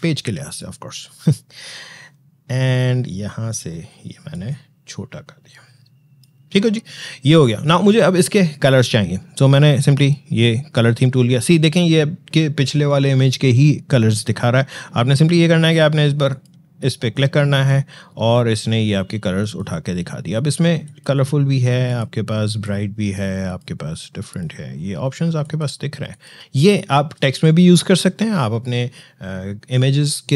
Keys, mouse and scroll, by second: 0.9-1.7 scroll down 1, 4.1-8.7 drag, 9.8 click, 16.1 click, 19.2 click.